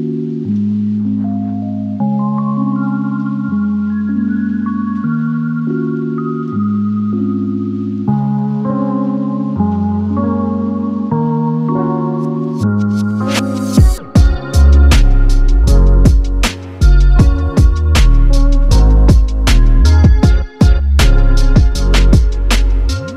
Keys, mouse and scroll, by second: 0.0-0.3 typing, 0.2 Return, 0.8-1.3 scroll up 12, 1.6-2.1 typing, 3.0 scroll down 11, 3.9 Escape, 4.8 Escape, 5.5-6.4 typing, 7.3 Delete, 7.8 Delete, 8.1 middle click, 8.4 scroll down 4, 8.8 middle click, 9.4 middle click, 11.8-12.5 scroll up 5, 12.5 typing, 13.8-14.2 scroll down 4, 14.2 middle click, 15.5 middle click, 15.9-16.4 scroll up 11, 16.4 r, 16.9 scroll down 10, 17.4-18.3 scroll up 19, 19.3-19.9 scroll down 16, 19.5 middle click, 20.1 space, 20.3 double click, 20.4 right click, 21.0 double click, 21.5-22.9 typing, 22.7 Return.